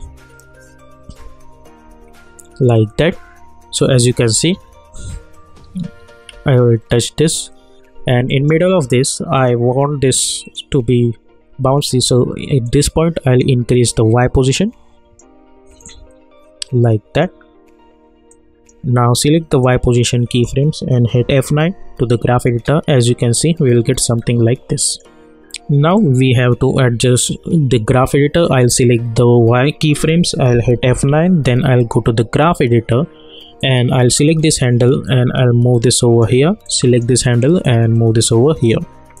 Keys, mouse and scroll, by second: 0.0 alt+scroll up 1, 1.4-2.7 scroll up 1, 5.6 Up, 6.3 Down, 8.3 click, 12.6-21.2 drag, 21.2 F9, 22.1 click, 22.5 space, 24.9-28.9 drag, 30.7 F9, 31.8-39.2 drag.